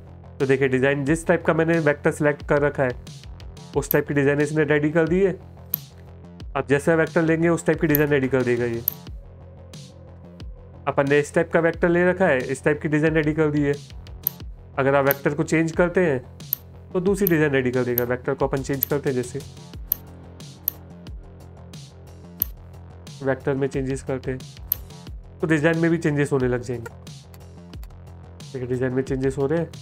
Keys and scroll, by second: 3.0 space, 3.7 space, 13.2 space, 14.2 space.